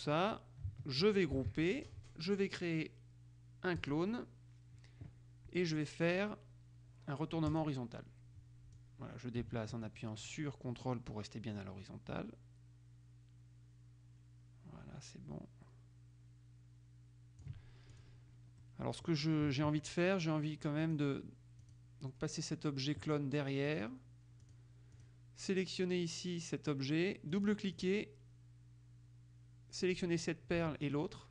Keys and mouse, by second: 1.5 ctrl+g, 3.9 click, 7.7 click, 9.0-18.6 drag, 18.8 middle click, 21.0 click, 21.8 click, 23.8 click, 24.6 click, 27.5-28.5 drag, 31.0 shift+click.